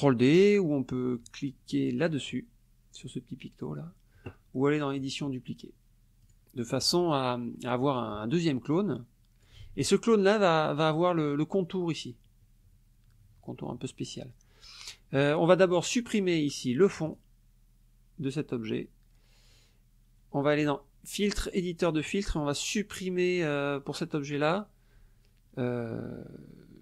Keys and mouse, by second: 5.0 click, 6.2 click, 6.7 middle click, 7.6 middle click, 8.5-9.6 drag, 9.6 ctrl+z, 17.1 click, 20.6 click, 22.0 click.